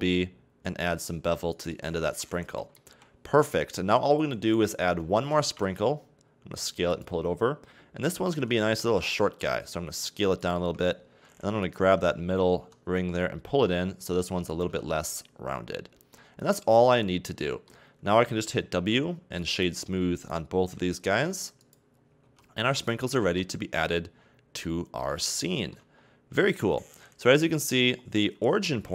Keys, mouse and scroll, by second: 1.7 a, 1.9 Tab, 2.1 scroll down 1, 2.3-2.9 middle drag, 2.9 KP_1, 3.7-5.3 scroll up 1, 5.3 shift+d, 8.3 s, 10.6 Tab, 11.6 alt+right click, 12.6 g, 14.7 a, 14.8 Tab, 15.3-15.8 scroll up 1, 15.8-16.1 scroll down 1, 16.1-18.7 middle drag, 18.7 w, 20.2 right click, 21.1 w, 22.0 scroll down 2, 22.2 a, 22.6 Tab, 22.9 Tab, 23.3 a, 23.8-24.6 scroll down 8, 24.6-26.0 middle drag, 26.0-27.3 scroll up 2, 27.3 KP_1, 27.9-28.9 scroll up 1.